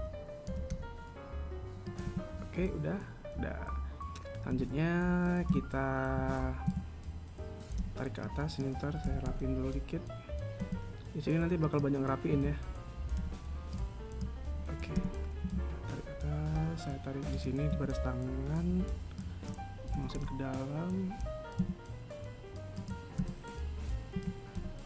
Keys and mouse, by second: 0.2 right click, 0.9 g, 2.5 a, 4.9 KP_1, 5.9 z, 6.6 a, 7.1 a, 8.2 b, 12.8 a, 13.6 b, 18.1 a, 19.1 b, 23.6 KP_3, 24.6 a.